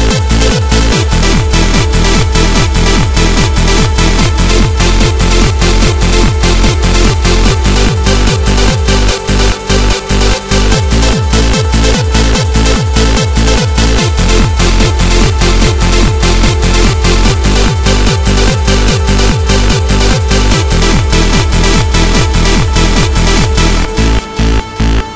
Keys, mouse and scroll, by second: 0.6 click, 1.9-2.5 scroll up 5, 2.7 middle click, 5.4 p, 6.4 right click, 9.4 click, 13.0 click, 16.7 right click, 17.7 click, 18.1 click, 21.6 right click, 22.5 click, 22.9 click.